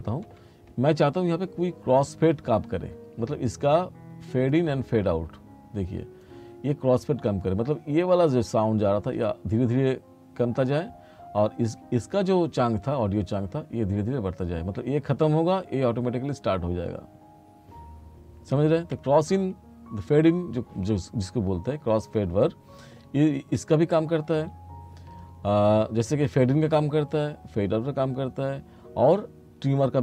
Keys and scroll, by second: 19.0 r.